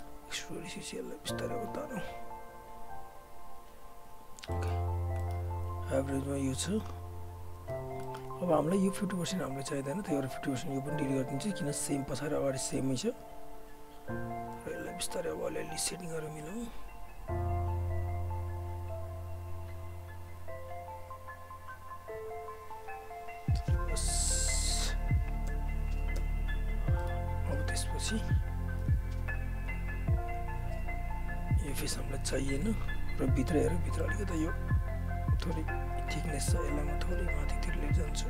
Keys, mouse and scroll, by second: 0.0 alt+right click, 0.9 click, 4.2 alt+right click, 4.5 alt+middle click, 4.6 alt+scroll up 1, 4.8 alt+right click, 5.2 alt+middle click, 6.9 click, 7.4 w, 7.8 alt+right click, 8.0 alt+middle click, 8.4 right click, 9.5 click, 11.0 Delete, 12.2 alt+right click, 12.6 alt+middle click, 12.8 alt+scroll up 1, 12.8 alt+right click, 14.2 click, 14.5 w, 15.1 click, 23.9 alt+right click, 24.1 alt+middle click, 24.3 alt+right click, 25.5 space, 26.7 alt+click, 27.0 alt+middle click, 27.1 alt+right click, 27.3 alt+click, 27.7 right click, 29.4 alt+click, 32.2 Delete, 33.0 alt+click, 34.0-36.5 alt+middle drag, 36.5 right click, 37.3 click, 37.6 w, 37.9 click.